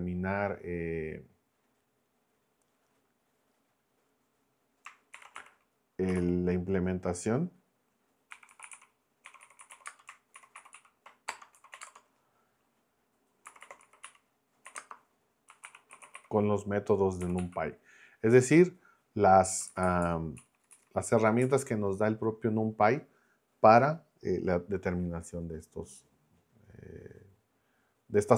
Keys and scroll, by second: 4.9-6.6 typing, 8.1-17.9 typing, 19.5 Left, 20.1 Left, 20.4 Right.